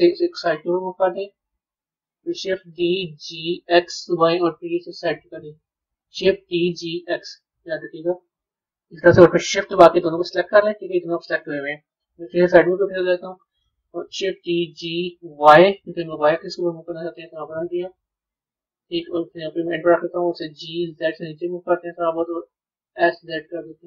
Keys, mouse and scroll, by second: 2.6 shift+d, 7.3-9.9 middle drag, 9.9 shift+click, 11.7 KP_3, 12.7-13.7 scroll down 3, 14.2 shift+d.